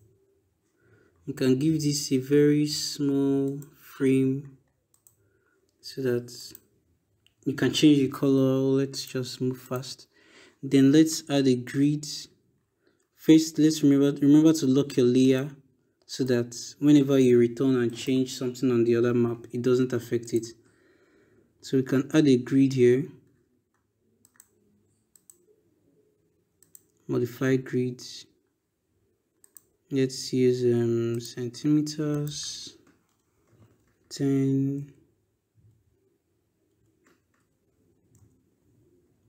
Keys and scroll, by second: 32.9 BackSpace, 33.6 1, 34.6 0, 36.5 BackSpace, 37.2 0, 37.9 Return.